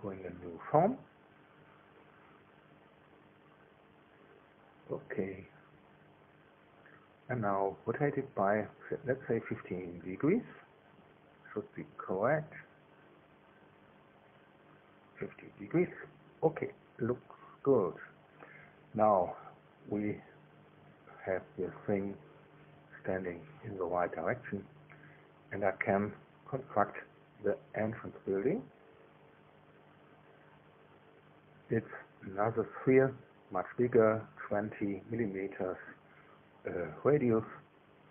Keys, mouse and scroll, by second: 2.0 click, 4.4 click, 5.9 click, 8.2 click, 13.7 KP_1, 14.0 KP_5, 15.2 Delete, 23.0-27.4 drag, 28.0 KP_1, 34.9 shift+click.